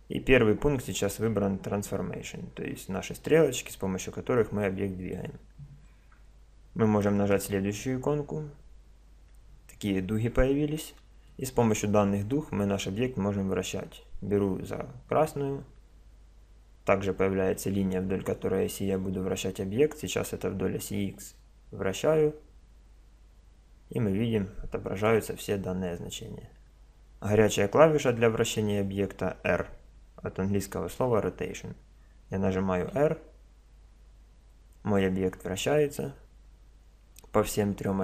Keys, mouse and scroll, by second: 4.0-5.6 drag, 5.6 middle click, 5.7 click, 7.3-8.9 middle drag, 8.9 click, 8.9 middle click, 11.3-15.3 middle drag, 15.3 click, 32.9 r.